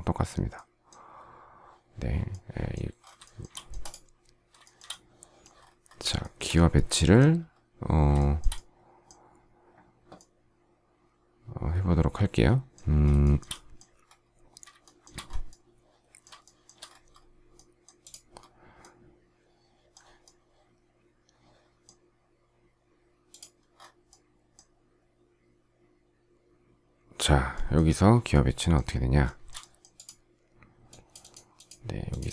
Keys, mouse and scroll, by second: 3.1 shift+middle click, 4.6 shift+middle click, 6.1 shift+middle click, 8.1 shift+middle click, 13.1 shift+middle click, 14.7 shift+middle click, 16.3 shift+middle click, 29.1 shift+middle click.